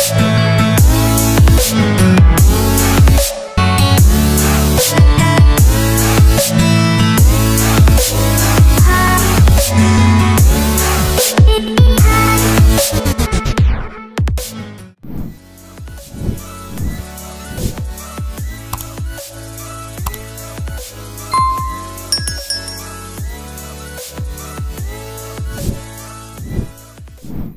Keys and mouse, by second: 2.2 click, 2.5 click, 3.3-5.7 drag, 6.0 click, 7.4 shift+middle click, 9.1 middle click, 10.4 middle click, 13.1 middle click, 15.6-17.3 middle drag, 21.5-23.5 middle drag, 24.8 click.